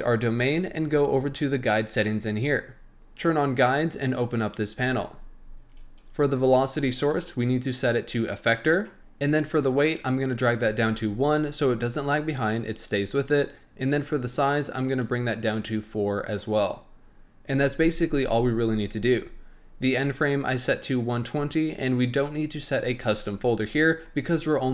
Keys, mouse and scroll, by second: 1.1-2.0 scroll down 6, 2.0-3.5 scroll down 4, 3.5 click, 4.2 click, 4.8-7.0 scroll down 1, 7.0-9.0 drag, 9.8-11.0 drag, 14.8 click.